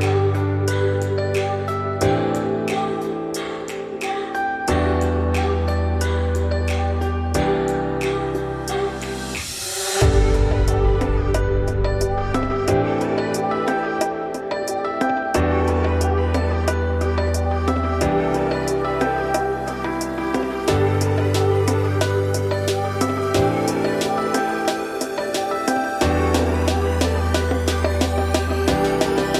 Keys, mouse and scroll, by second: 0.5-1.0 scroll down 4, 1.0-1.3 shift+middle drag, 1.3-1.9 scroll up 4, 1.9 shift+middle click, 2.8 scroll up 1, 3.7 click, 4.8-6.7 drag, 7.0 scroll down 3, 7.4-8.5 shift+middle drag, 8.5 click, 9.0 shift+middle drag, 9.2 scroll up 5, 10.4-11.9 drag, 12.6-13.6 drag, 13.6-14.2 scroll up 3, 14.2 click, 15.5-17.5 drag, 17.8-18.4 scroll down 6, 17.8 middle click, 18.4 middle click, 18.4 scroll up 6, 18.9 shift+middle click, 19.1-19.4 shift+scroll up 3, 19.4 click, 19.9-20.8 scroll up 4, 21.4-22.1 scroll down 3, 22.1 click, 22.6 s, 24.7 scroll up 1, 24.8 Tab, 25.2 3, 25.3 click, 26.2 shift+click, 26.5 g, 27.8 ctrl+KP_Add, 29.1 ctrl+KP_Subtract.